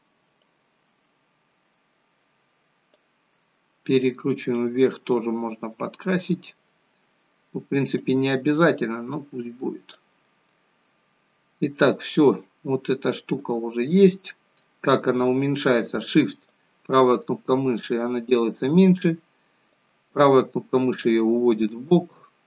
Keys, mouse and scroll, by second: 0.9 click, 3.3 middle click, 4.6 click, 8.3 click, 10.5 middle click, 13.3 right click, 16.4 shift+right click, 19.7 right click, 21.7-22.3 scroll up 4, 22.3-22.4 scroll down 2.